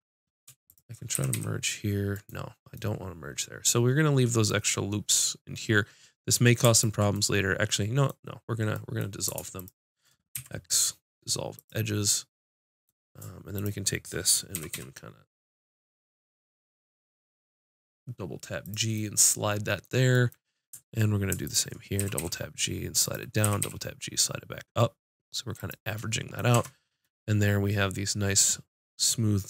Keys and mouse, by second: 0.7-2.8 drag, 1.2 g, 2.8 right click, 7.2-8.6 middle drag, 9.6 middle click, 10.4-11.7 drag, 10.4 x, 13.6 click, 14.6 g, 14.8-17.4 drag, 18.7-22.0 drag, 22.0 g, 22.5 click, 23.5 g, 23.5-25.2 drag, 26.6 Tab.